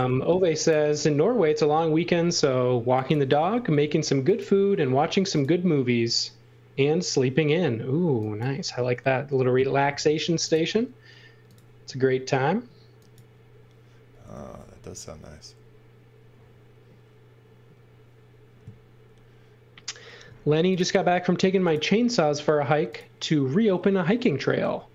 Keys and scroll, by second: 3.8 a, 8.7 space, 9.9 a, 14.7 l, 20.2 a, 24.6 l.